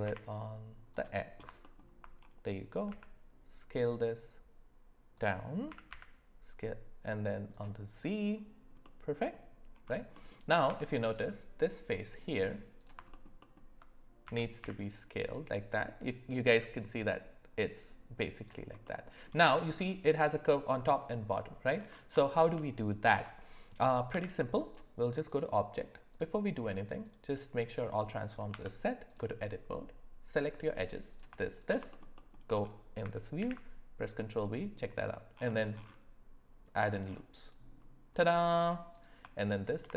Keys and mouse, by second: 2.9 s, 5.7 s, 8.8-9.3 middle drag, 10.1 middle click, 10.7 Tab, 12.1 click, 14.2 s, 18.8 middle click, 22.2 shift+middle click, 24.1 Tab, 25.3 click, 26.1-27.7 drag, 28.5 Tab, 30.4 click, 31.5 shift+click, 32.1 alt+middle click, 33.4 ctrl+b, 38.2 middle click, 38.9 click, 39.6 shift+click.